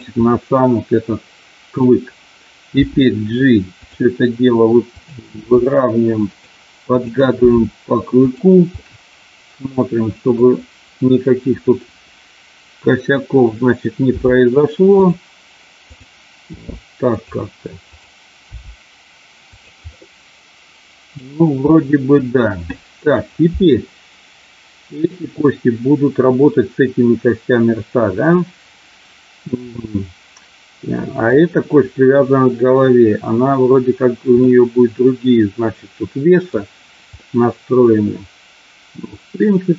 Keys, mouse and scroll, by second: 0.2-1.8 middle drag, 2.7 g, 3.8 click, 5.3 g, 6.2 click, 6.8 click, 8.3 g, 8.7-10.4 middle drag, 14.1 g, 15.0 click, 16.5 g, 17.1 click, 17.8 click, 18.5 g, 19.5 click, 19.8-21.1 middle drag, 21.7-23.1 middle drag, 29.7-31.2 middle drag, 34.5-36.5 middle drag, 37.2-39.7 middle drag.